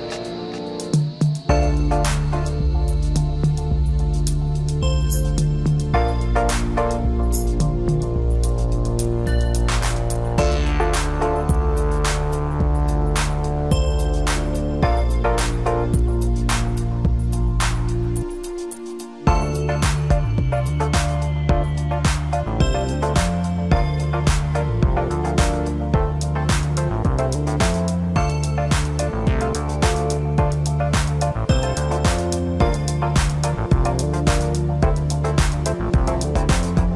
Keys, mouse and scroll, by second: 0.3 click, 3.8 scroll down 3, 4.4-6.0 middle drag, 6.0 scroll up 2, 6.6 scroll up 2, 10.7 ctrl+b, 17.4-18.0 scroll down 2, 18.0-19.1 middle drag, 19.1 scroll up 3, 22.5 click, 23.1-25.1 scroll down 2, 25.1 ctrl+i, 27.0-28.3 scroll up 2, 29.8 ctrl+i, 31.3-32.4 scroll up 1, 32.4 e, 34.3-35.2 scroll down 1, 35.2-36.9 middle drag.